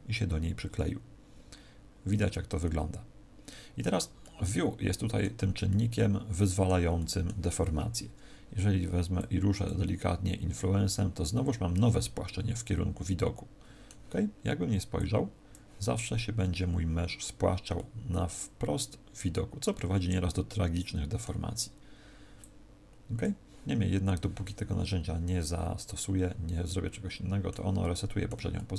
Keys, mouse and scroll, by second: 4.1 middle click, 5.6 middle click, 6.9 middle click, 9.1 click, 12.2 middle click, 14.9 click, 17.7 middle click, 22.3 click, 25.9 middle click, 27.8 middle click, 28.5 middle click.